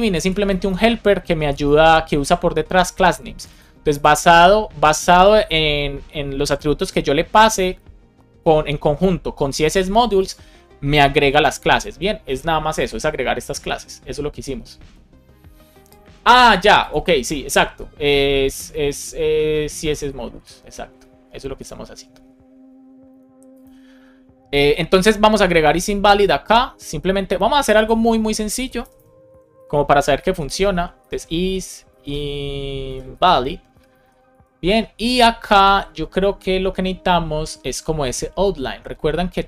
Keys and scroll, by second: 0.1 Left, 0.6 shift+super+Right, 1.3 Left, 28.8 Return, 30.1 BackSpace, 33.7 space, 33.9 shift+[, 34.2 Return.